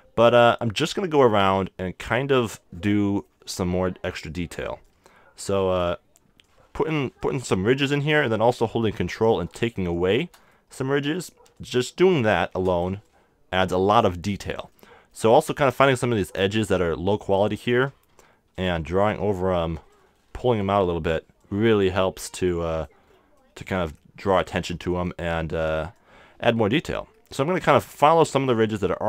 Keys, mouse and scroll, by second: 1.6-3.4 drag, 2.9-4.9 middle drag, 4.9-8.9 drag, 9.3-10.8 drag, 10.7 right click, 14.7 click, 14.9 middle click, 18.1 f, 18.6-24.4 drag, 23.0-24.6 middle drag, 24.7-27.1 middle drag, 26.0-29.0 drag, 27.7-29.0 middle drag.